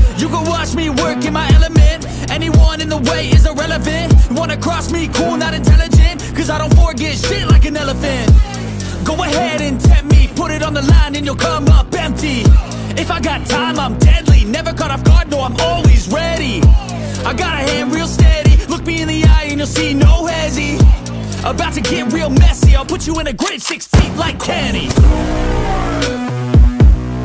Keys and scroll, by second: 14.9 super+Up, 21.6 Return.